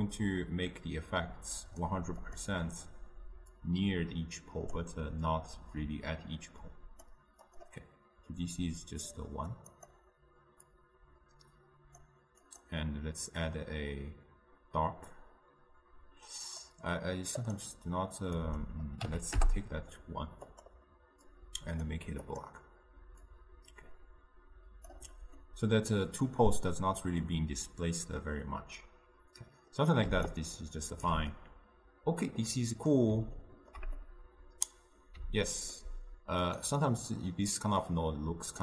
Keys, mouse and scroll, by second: 11.0-21.6 drag, 23.6-25.5 drag, 25.5-30.4 middle drag, 30.4-31.5 right drag, 31.5-38.6 middle drag.